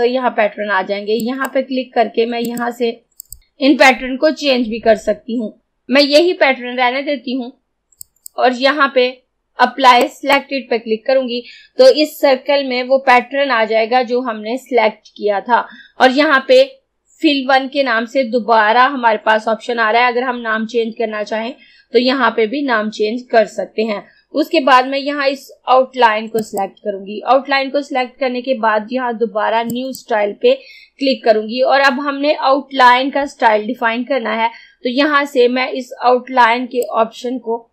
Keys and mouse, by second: 1.3 click, 8.1-26.5 drag, 29.7 click, 29.8 click, 36.9-37.7 drag.